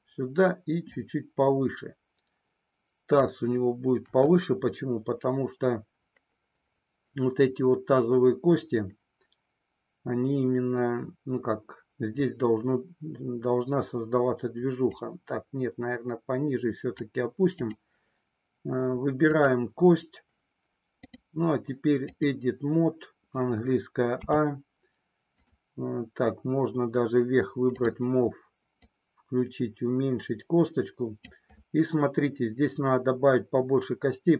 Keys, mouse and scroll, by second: 1.0-3.3 drag, 4.0 KP_1, 15.1-17.1 drag, 19.4 click, 21.1-22.3 drag, 24.2 a, 27.7 click, 28.7-31.2 drag.